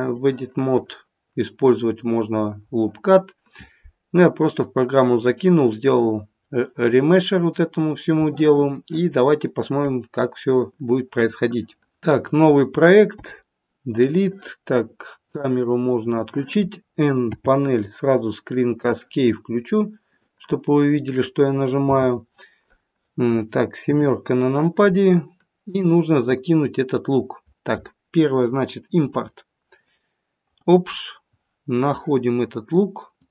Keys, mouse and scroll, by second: 21.8 n, 23.8 KP_7, 25.6 click.